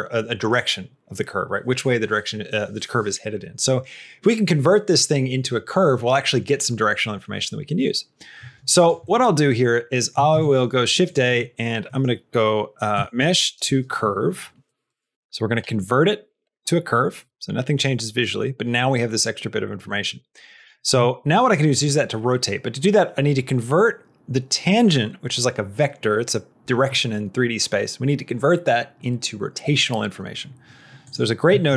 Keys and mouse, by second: 8.7 click, 8.9 middle click, 9.9 middle click, 10.2 shift+a, 18.2 middle click, 18.6 click, 19.7 middle click, 20.4 click, 20.8 shift+a, 30.9 click, 31.6 shift+a.